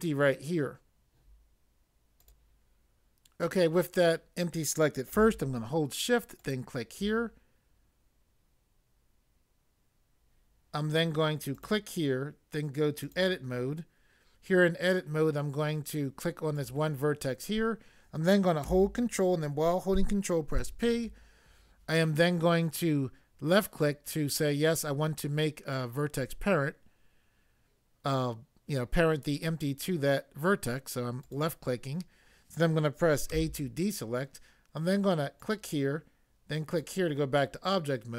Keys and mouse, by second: 2.2 click, 2.2 click, 6.4 shift+click, 11.5 click, 16.6 click, 20.6 ctrl+p, 31.2 click, 33.3 a, 35.5 click, 36.7 click, 36.8 click.